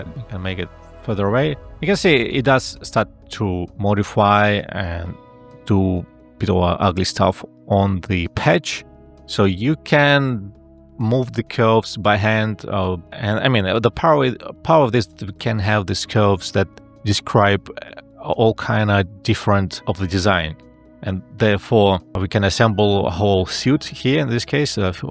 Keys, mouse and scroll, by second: 8.6 ctrl+z, 18.5 space, 22.1 ctrl+z.